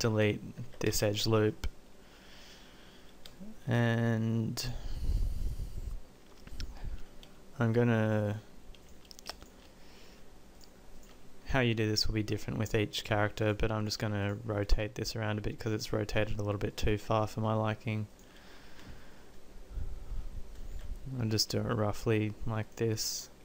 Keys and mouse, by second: 6.9 middle click, 8.3 click, 9.8 middle click, 20.8 r.